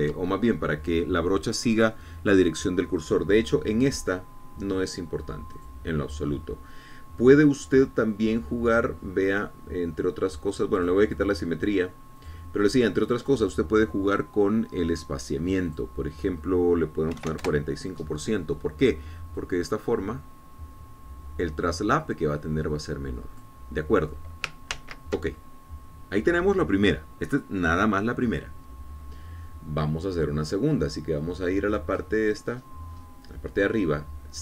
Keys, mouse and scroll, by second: 0.5 ctrl+z, 6.7 click, 10.1 scroll down 2, 10.4 scroll up 2, 10.5 scroll down 2, 10.7-11.7 scroll up 2, 11.7 scroll down 1, 11.9 click, 12.4 scroll down 1, 13.4 click, 14.4 click, 16.9 click, 18.3 KP_4, 18.4 KP_5, 18.6 KP_Enter, 20.6-24.8 drag, 25.9 ctrl+z, 33.1-34.4 scroll up 6.